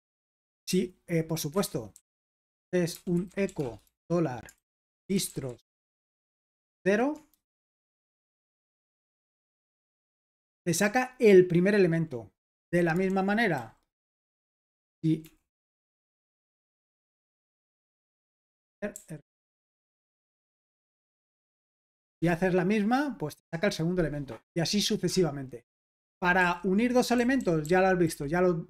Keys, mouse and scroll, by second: 0.0-9.0 typing, 1.5 Escape, 8.1 Escape, 9.1 super+h, 9.5 ctrl+p, 9.8 Return, 13.1 super+l, 13.3-15.9 typing, 17.0 f, 18.4-20.6 typing, 19.7 Escape, 20.6 super+h, 21.2 ctrl+p, 22.2 Return, 25.8 Escape, 25.8 space, 26.4 super+l, 27.4-28.0 typing.